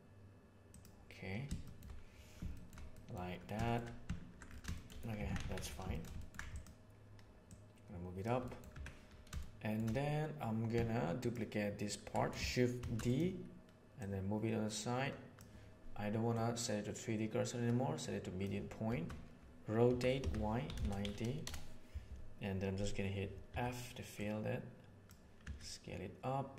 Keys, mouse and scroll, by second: 1.5 shift+middle click, 2.5 shift+middle click, 2.8 middle click, 5.1 Tab, 5.3 alt+a, 6.1 ctrl+middle drag, 6.5 right click, 7.5 right click, 8.3 middle click, 8.7 Tab, 9.3 shift+middle click, 12.8 shift+d, 13.9-15.3 drag, 16.3-18.4 drag, 19.8 r, 23.5 f, 24.1 click, 25.4 s.